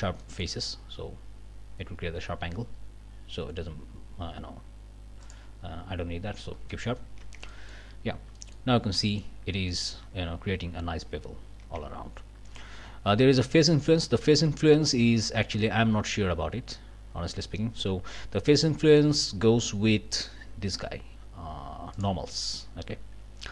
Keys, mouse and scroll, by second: 0.2 click, 0.9 scroll down 1, 5.2 click, 6.3 scroll up 1, 6.7 click, 7.2 Tab, 7.4 scroll up 1, 7.5 middle click, 8.0 scroll down 1, 8.4 middle click, 8.8 scroll up 1, 9.0 middle click, 11.4 scroll down 1, 11.6 Tab, 20.1 click, 21.9 click.